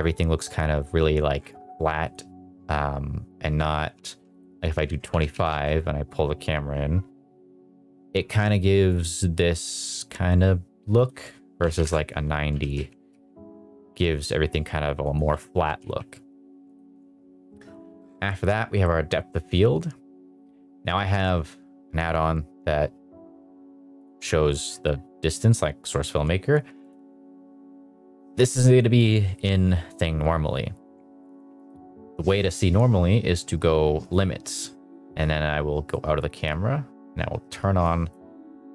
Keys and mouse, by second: 2.0-4.5 drag, 5.3 g, 5.3 z, 5.4 z, 8.9 click, 11.0 click, 12.5 g, 12.7 z, 13.1 z, 15.0 click, 15.5 g, 15.8 z, 16.6 click, 19.4 click, 24.0 click, 26.8 click, 31.5 click, 34.0 click, 34.9-35.9 middle drag, 37.8 click.